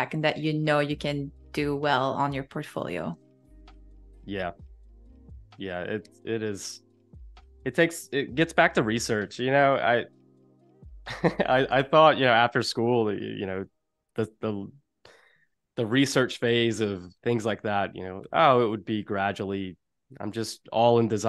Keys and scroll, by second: 0.4 i, 5.9 Delete, 9.1 o, 13.5 i, 16.1 a, 17.3 z, 18.4 a.